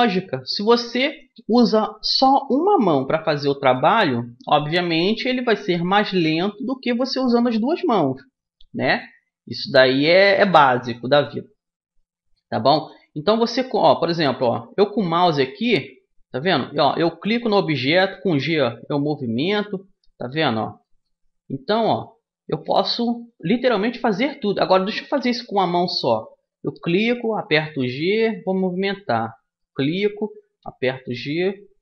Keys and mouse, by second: 0.7-2.7 drag, 3.1-12.4 middle drag, 12.4-13.6 drag, 13.6-15.3 middle drag, 15.3 a, 16.1-18.0 middle drag, 17.4 g, 19.6 click, 19.9-21.4 right drag, 19.9 g, 20.7 g, 22.2-23.7 right drag, 22.4 g, 23.7 click, 25.0-26.9 drag, 26.4 g, 29.2-31.1 drag, 30.2 g.